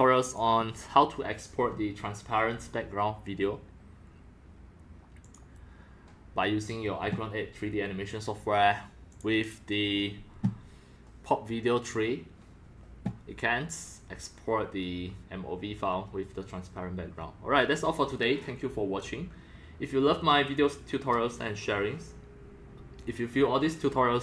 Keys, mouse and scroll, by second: 0.2 click, 0.5-3.3 drag, 3.9-6.0 drag, 6.1 click, 6.4 click, 8.4 click, 9.1 click, 9.7-14.3 drag.